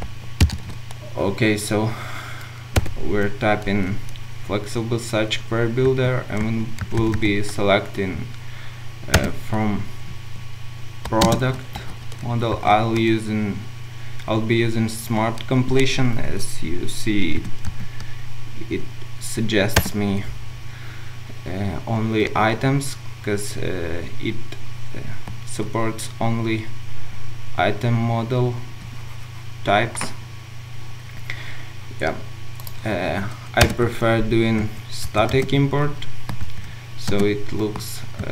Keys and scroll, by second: 0.5 ctrl+shift+super+F12, 11.2 Return, 11.6 ctrl+shift+space, 19.8 Return, 33.6 alt+Return.